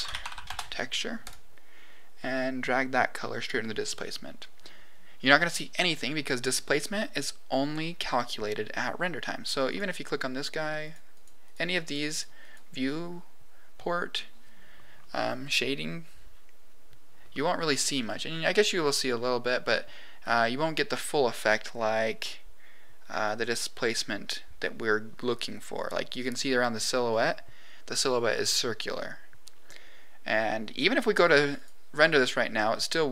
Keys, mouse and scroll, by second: 2.6 click, 9.9-11.2 drag, 11.8 click, 12.0 click, 12.4 click, 31.6 click.